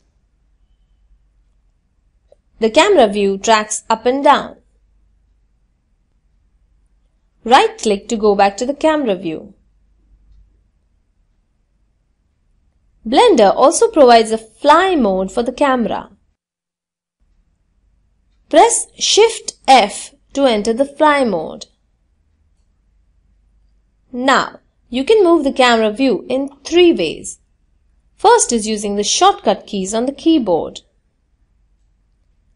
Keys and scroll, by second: 16.4 shift+f, 17.0 shift+f, 31.8 w.